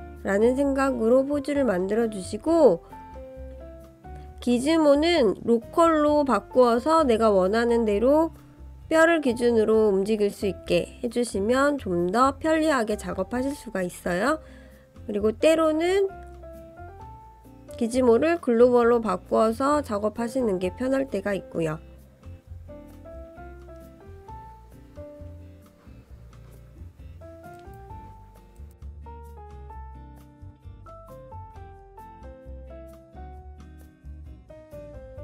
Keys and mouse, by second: 0.9 click, 1.3-2.3 drag, 2.9 click, 3.4 click, 3.8 click, 4.3 click, 6.1 click, 6.7-8.7 drag, 9.4 click, 10.6-11.4 middle drag, 12.1-12.5 middle drag, 13.0 click, 14.4 click, 15.2 click, 16.4-17.7 drag, 18.2-18.8 middle drag, 19.8 click, 20.4 ctrl+z, 21.5-22.1 drag, 22.6-23.7 drag, 23.8-24.3 middle drag, 24.8-25.1 middle drag, 25.6 click, 26.2 click, 29.4 middle click, 30.2 click, 31.9 click, 32.3-32.9 middle drag, 33.5 ctrl+KP_3.